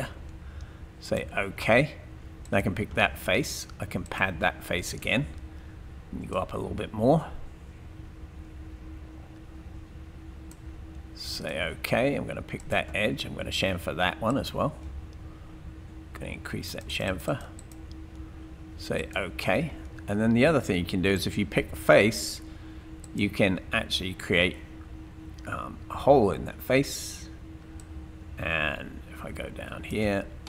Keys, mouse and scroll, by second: 2.4 click, 12.6 click, 21.2 click, 23.0 click.